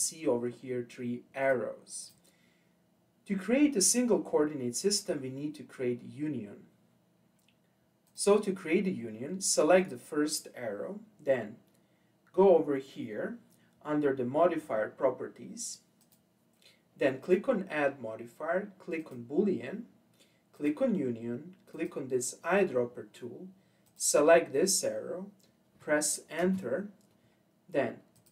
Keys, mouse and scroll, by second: 1.4 click, 2.0 click, 8.0 click, 9.8 click, 16.0 click, 19.1-20.2 drag, 20.5 click, 21.7 click, 26.4 Return, 28.2-28.3 drag.